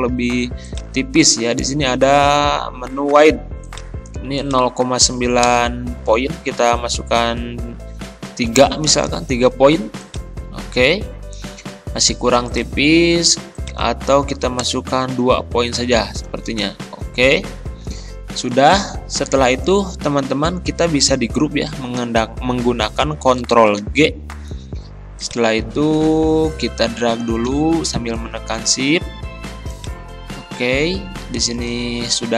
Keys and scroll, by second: 5.5 BackSpace, 8.5 3, 14.7 BackSpace, 16.0 2, 16.5 Return, 23.8 ctrl+g.